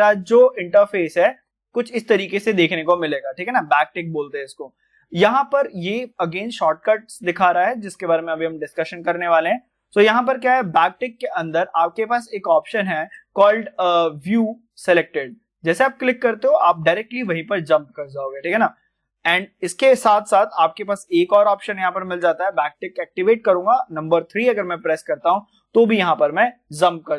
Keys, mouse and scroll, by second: 1.3 `, 15.1 `, 15.2 click, 17.2-17.6 scroll down 1, 18.5 click, 22.3 click, 22.3 `, 24.7 click, 26.2 scroll down 1.